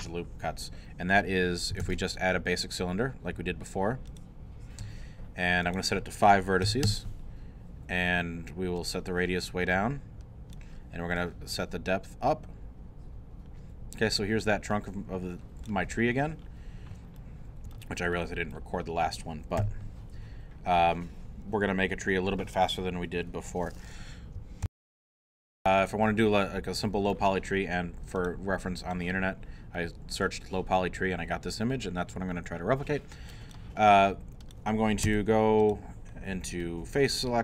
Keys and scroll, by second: 1.8 shift+a, 6.6 5, 6.8 Return, 24.7 super+., 25.3 alt+super+., 35.0 Tab.